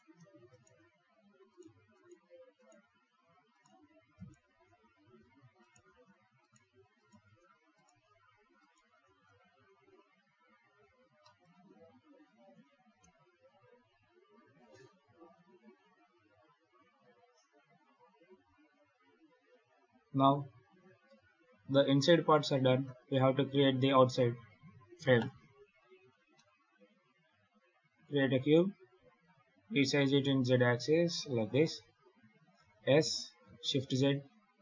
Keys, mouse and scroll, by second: 0.0 scroll down 2, 0.0 shift+r, 0.4 shift+right click, 0.6 shift+r, 1.4 right click, 1.8 shift+right click, 2.4 shift+right click, 2.7 shift+r, 3.4 right click, 4.0 shift+right click, 4.7-5.2 scroll down 2, 5.5 shift+right click, 5.7 shift+r, 6.3 right click, 6.8 shift+right click, 7.1 shift+r, 7.6 right click, 8.5 shift+right click, 8.7 shift+r, 9.1 Tab, 9.7 z, 10.2-10.6 scroll up 4, 10.7 alt+a, 11.1 middle click, 11.5 ctrl+s, 11.7-12.5 scroll down 8, 13.5 KP_7, 14.5-15.2 scroll down 2, 21.3 shift+s, 23.3 shift+a, 26.2 middle click, 28.3 s, 31.8 KP_7, 32.4 s.